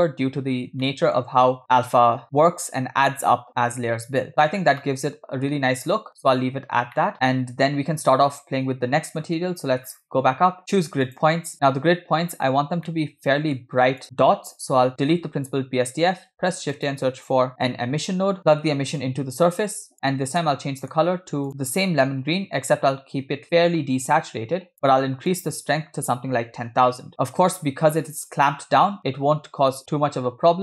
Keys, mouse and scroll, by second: 0.6 scroll down 2, 0.9-1.2 shift+middle drag, 4.4 scroll down 4, 4.8-5.6 shift+middle drag, 6.0 scroll up 3, 6.5-6.9 scroll down 2, 7.0 shift+middle click, 9.2-10.1 scroll up 9, 11.1 click, 12.5 scroll down 2, 12.9 middle click, 14.2 click, 15.6 x, 16.1 scroll up 1, 16.5 shift+a, 19.0-20.3 drag, 20.3 scroll up 1, 20.5 middle click, 21.1 scroll up 2, 21.5 click, 25.5-27.1 drag, 27.1 0.